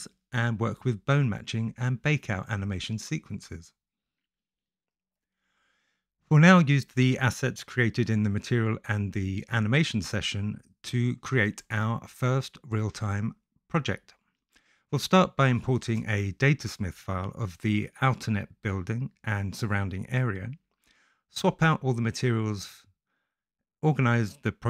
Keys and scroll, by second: 8.4-9.8 typing, 10.2 ctrl+l, 11.5-16.1 typing, 15.7 Return, 17.2 s, 19.9 ctrl+b, 21.8 t, 22.2 s, 22.6 Return, 23.5 s, 24.2 Return, 24.4 F2.